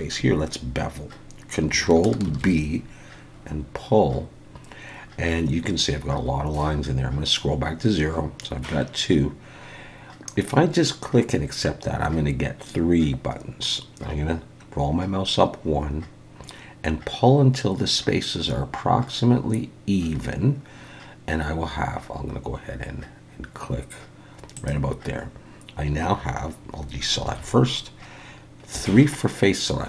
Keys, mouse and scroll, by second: 2.3 ctrl+b, 27.3 alt+a, 28.7 3.